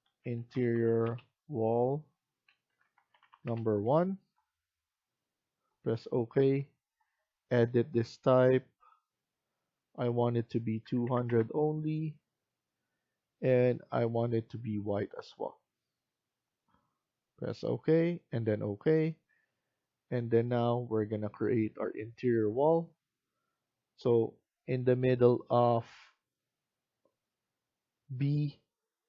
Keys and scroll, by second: 0.0-1.2 typing, 2.4-3.7 typing, 5.8-6.6 typing, 10.5-11.5 typing.